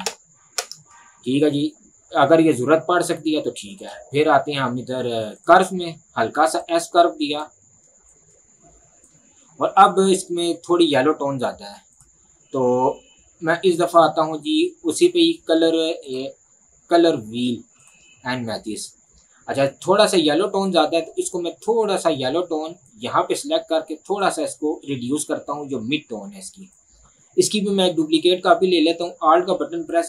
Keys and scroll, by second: 0.7 Return.